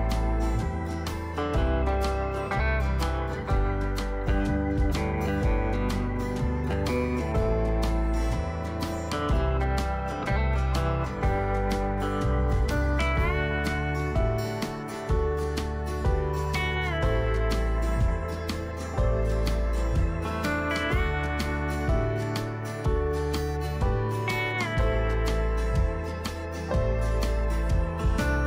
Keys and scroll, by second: 17.7-18.5 typing.